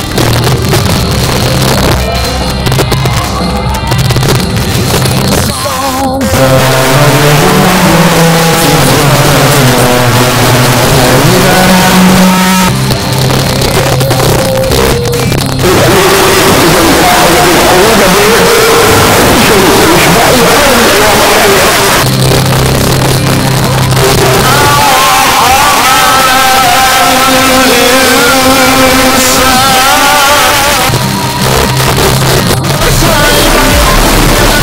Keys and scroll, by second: 12.3 Page_Down, 21.7 Page_Down, 30.5 Page_Down.